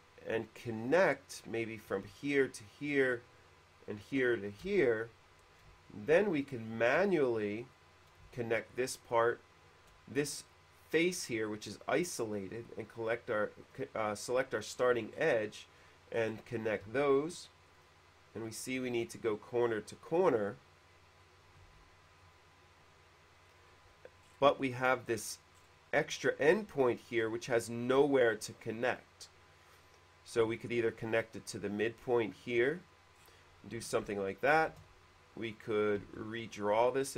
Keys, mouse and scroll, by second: 0.6 click, 1.8 click, 3.2 click, 4.6 click, 5.0 space, 7.8 click, 9.3 shift+click, 13.8 click, 14.8 middle click, 15.0 scroll up 1, 15.1 middle click, 16.4 middle click, 17.8 click, 19.2 click, 21.4 click, 21.9 q, 22.4 click, 22.4 q, 23.7 click, 24.4 middle click, 25.4 middle click, 27.0 middle click, 31.4 click, 32.9 click, 33.2 middle click, 34.2 ctrl+z, 35.0 shift+e, 35.6 click, 36.2 q, 36.6 click.